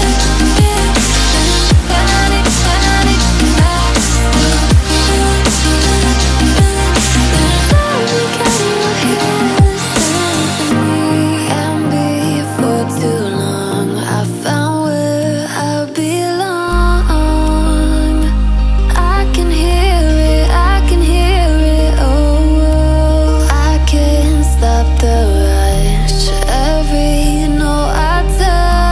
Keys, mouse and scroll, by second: 4.8 alt+scroll up 1, 5.7 ctrl+z, 7.2-16.6 drag, 18.0 alt+scroll down 1, 18.9 alt+scroll up 1, 19.4-24.1 drag, 25.4-26.0 alt+scroll up 1, 26.1 click, 26.5-28.2 alt+drag, 28.2 ctrl+d.